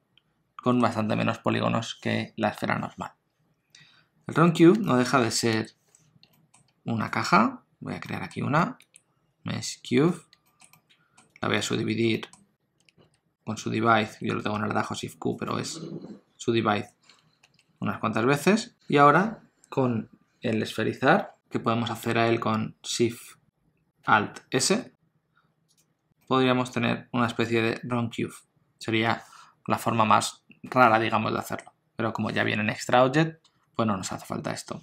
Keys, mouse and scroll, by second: 3.2-3.8 scroll down 1, 3.8-4.7 scroll down 1, 4.8 shift+middle click, 5.5 KP_7, 6.3 shift+middle click, 7.1 shift+right click, 8.1 shift+middle click, 8.7 shift+a, 10.5 shift+middle click, 10.7 middle click, 11.3 scroll up 1, 11.6 Tab, 12.1 middle click, 12.8 shift+q, 13.0 shift+q, 15.3 right click, 17.5 shift+q, 20.8-21.4 scroll down 7, 21.4 middle click, 24.6 alt+shift+s, 26.2 middle click, 31.4 middle click.